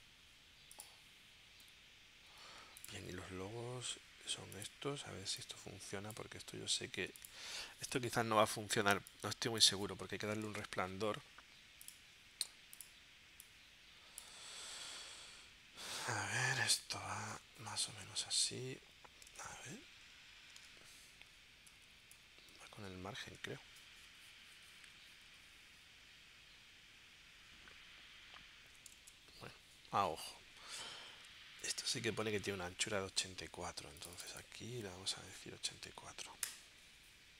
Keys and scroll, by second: 1.7 w, 2.3 w, 10.5 super+z, 14.7 super+Tab, 16.1 super+Tab, 17.9 shift+Left, 18.8 shift+Left, 19.4 super+Tab, 21.3 Up, 23.3 super+Tab, 35.7 8, 36.3 4, 36.4 Return.